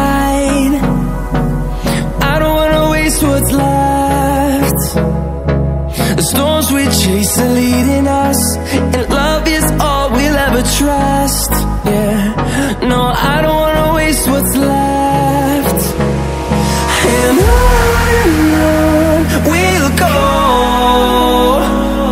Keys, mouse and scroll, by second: 0.3 ctrl+alt+scroll down 1, 1.1 ctrl+alt+scroll up 1, 2.3-4.1 drag, 4.1 ctrl+alt+scroll up 1, 5.2-6.7 alt+shift+drag, 6.7-7.1 ctrl+alt+scroll up 2, 7.6 click, 8.6 ctrl+alt+scroll down 1, 10.2-13.9 drag, 16.8 ctrl+alt+scroll down 1, 17.4 click, 18.1 ctrl+alt+scroll up 1, 19.0 ctrl+scroll up 1.